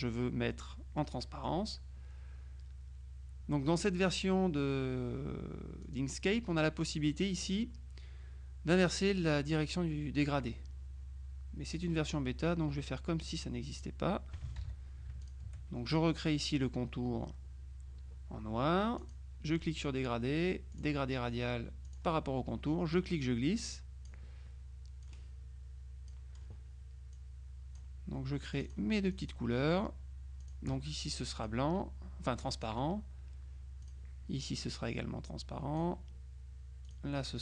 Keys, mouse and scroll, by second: 1.3 middle click, 5.9 click, 11.8 click, 13.8 click, 14.7 ctrl+z, 15.3 shift+click, 19.1 click, 20.8 click, 21.9 click, 23.0-24.6 drag, 25.1-26.9 drag, 27.2 click, 28.6 click, 30.5 click, 31.5-33.2 drag, 33.9 click, 34.9-36.3 drag, 36.9 click.